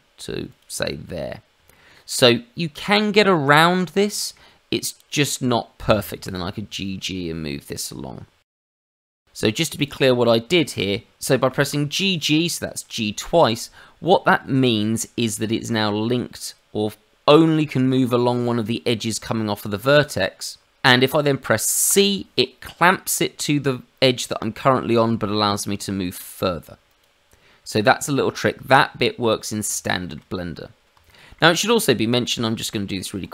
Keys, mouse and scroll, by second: 0.8-1.5 scroll down 3, 1.6 shift+middle click, 2.5-3.9 scroll up 1, 4.0 shift+middle click, 5.1 click, 6.2 g, 9.7 click, 10.5 shift+middle click, 11.4 g, 27.3-28.5 scroll down 2, 28.5 Tab, 29.8 shift+middle click, 30.3 middle click, 31.4 shift+middle click, 31.6 click, 32.0 Tab.